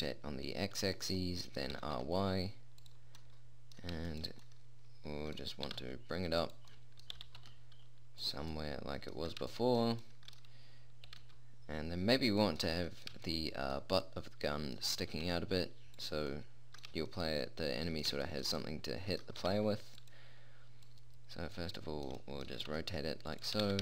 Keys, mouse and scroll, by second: 1.6 middle click, 2.1 r, 6.1 g, 6.8 click, 7.5 g, 11.5 r, 13.0-15.5 middle drag, 15.5 r, 19.8 g, 21.2 middle click, 22.9 r.